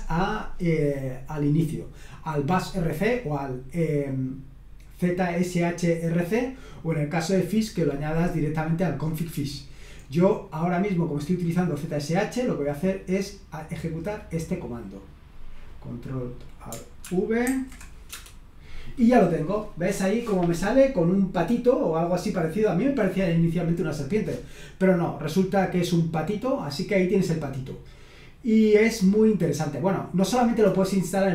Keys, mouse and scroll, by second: 9.9-10.9 scroll down 1, 12.4-13.4 drag, 14.7-16.0 drag, 16.2 click, 17.4 ctrl+alt+v, 18.1 Return, 21.4-23.1 drag, 27.0-27.9 scroll down 1, 27.9-28.6 scroll down 1, 28.6-29.1 scroll down 1, 29.8-31.3 scroll up 2.